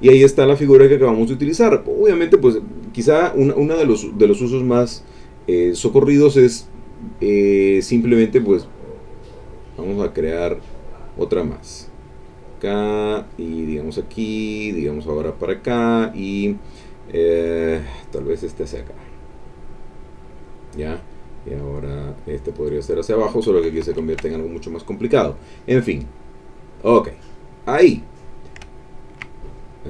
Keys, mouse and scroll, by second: 0.2 ctrl+middle click, 11.2 click, 12.4 click, 13.6 click, 15.3 click, 17.9-20.6 drag, 21.5-22.9 drag, 23.8 ctrl+z, 26.7 click, 28.8 ctrl+middle click.